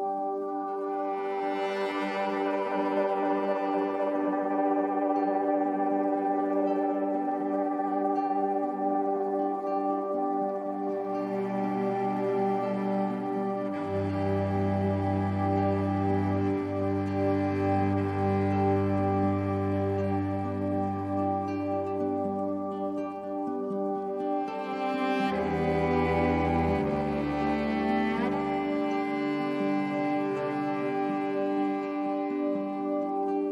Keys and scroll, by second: 12.2 a, 15.2 super+j, 27.0 i.